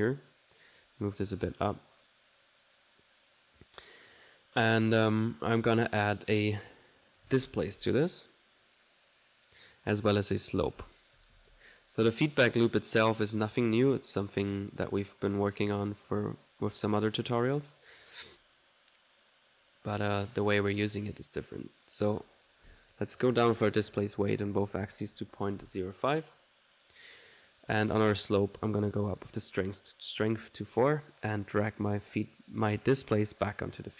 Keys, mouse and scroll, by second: 0.1-1.7 drag, 1.7-2.8 drag, 3.2 right click, 3.4-5.9 drag, 6.5 right click, 7.2 typing, 8.9-9.7 typing, 9.2 click, 9.5 click, 10.4 middle click, 10.8 s, 12.3 click, 12.3 typing, 12.8 click, 13.7 click, 13.9 click, 14.4 click, 15.2 click, 16.5 click, 18.5 click, 22.0 click, 26.1 click, 26.9 click, 27.7 click, 28.7 click, 30.6 middle click, 30.8 click, 31.4-33.9 drag.